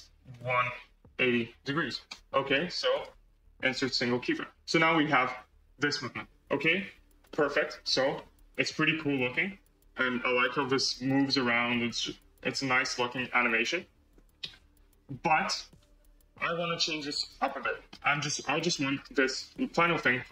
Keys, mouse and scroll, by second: 2.8-4.6 right drag, 4.6 space, 5.9 scroll down 1, 7.2-10.3 middle drag, 10.3 space, 10.9 click, 11.3-12.7 drag, 12.7 space, 13.1-15.5 middle drag, 16.9 space, 17.5 scroll down 2, 17.8-18.3 middle drag, 18.3 scroll up 1, 18.5-18.9 middle drag, 18.9 click, 19.9-20.3 middle drag.